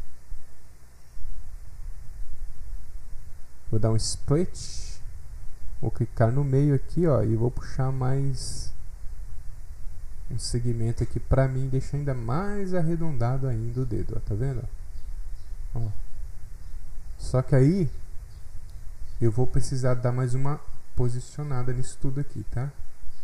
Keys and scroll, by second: 0.3 F8, 0.4 F8.